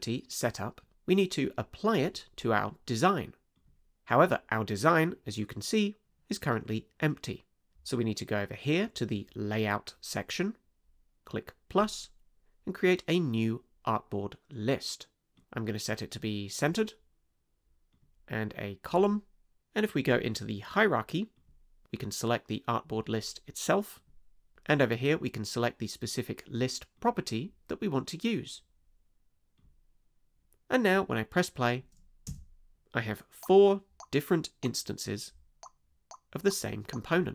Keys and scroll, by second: 32.3 space.